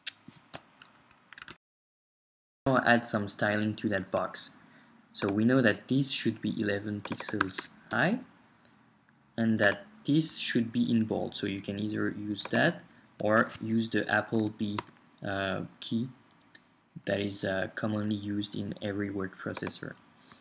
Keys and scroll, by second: 7.4-7.9 typing, 7.9 Return, 14.3 super+b.